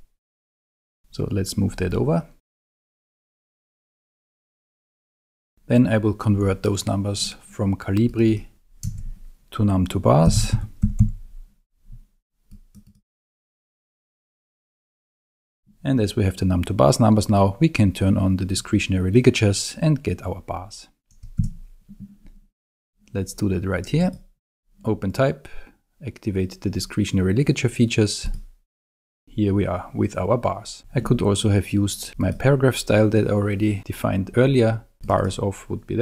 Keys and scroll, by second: 8.9 super+a, 10.0-11.5 typing, 21.4 super+a.